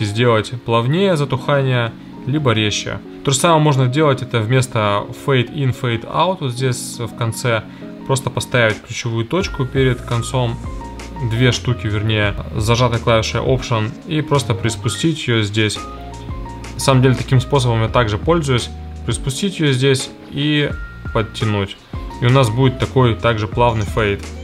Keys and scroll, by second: 23.6 space.